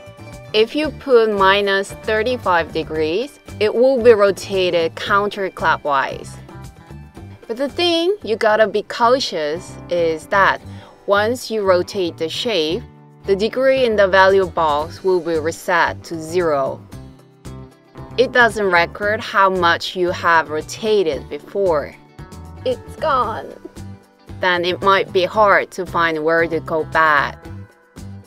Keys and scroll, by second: 0.9-2.8 typing, 3.7 Return.